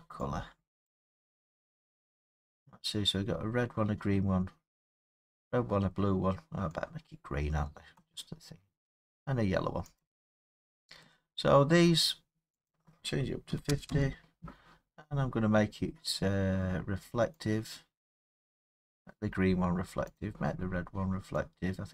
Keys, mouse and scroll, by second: 0.9 click, 8.0 click, 10.0 click, 10.6 middle click, 11.0 scroll, 11.7 middle click, 12.7 click, 13.5 typing, 13.9 Return, 15.2-16.2 scroll, 16.2 middle click, 16.3 middle click, 18.9 click, 20.2 click.